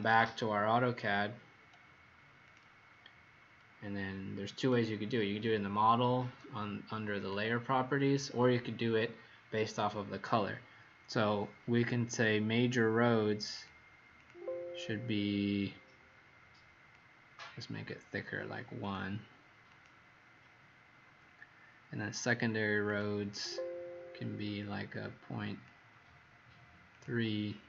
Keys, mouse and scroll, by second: 14.1 click, 15.6 click, 23.3 click, 24.5 click.